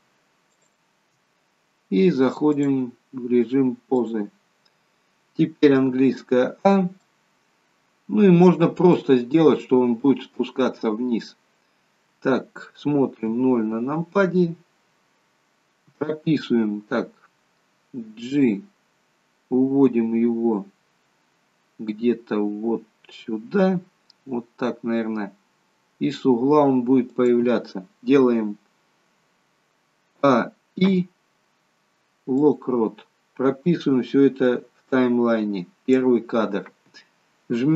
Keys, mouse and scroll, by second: 0.5 shift+click, 2.6 click, 5.9 a, 7.0 middle click, 8.9 middle click, 13.2 KP_0, 18.3 g, 30.2-30.8 a, 30.8 i, 34.6 click.